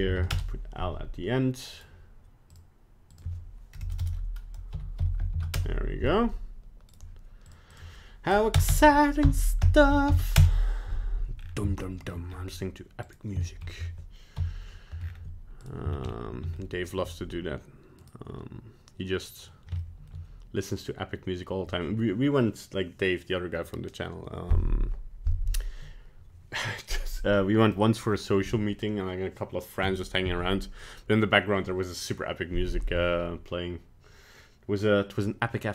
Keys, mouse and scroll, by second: 1.8 right click, 2.5 click, 4.0 BackSpace, 6.9 right click, 7.5 click, 8.7 BackSpace, 11.4 scroll down 4, 11.9 shift+middle click, 12.3-13.1 scroll up 2, 13.1 right click, 13.5 shift+middle click, 13.8 scroll up 1, 14.4 KP_1, 15.0 scroll up 6, 15.6 right click, 15.9 shift+scroll down 3, 16.6 shift+middle click, 18.0 right click, 19.8 shift+middle click, 35.6 middle click.